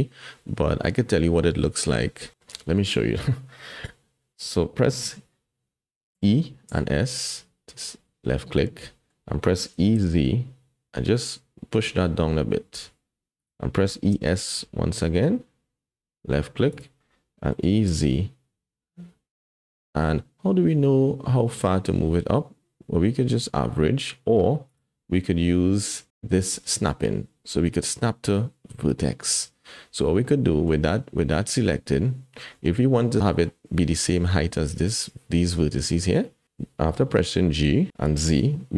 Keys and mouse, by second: 6.1 e, 8.5 click, 9.7 e, 13.9 e, 17.5 e, 26.6-29.3 drag, 30.3 click, 30.6 middle click, 32.6 middle click, 33.2 middle click, 37.0 g.